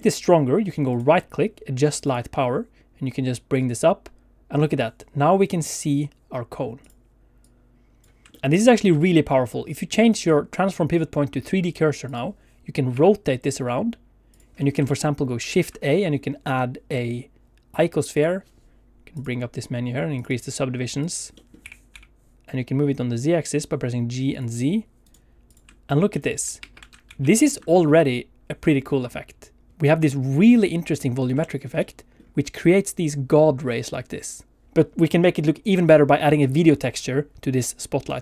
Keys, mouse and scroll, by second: 0.0 shift+middle click, 0.9 right click, 6.8 click, 7.4 click, 8.3 shift+middle click, 8.4 scroll down 1, 8.9 middle click, 9.1 middle click, 10.0 click, 12.9 r, 14.3 click, 14.5 scroll up 2, 14.8 shift+middle click, 15.4 shift+a, 19.1 click, 20.1 click, 20.3 click, 21.0 click, 21.5 middle click, 21.6 g, 21.9 z, 24.3 click, 25.0 right click, 25.9 middle click, 26.1 middle click.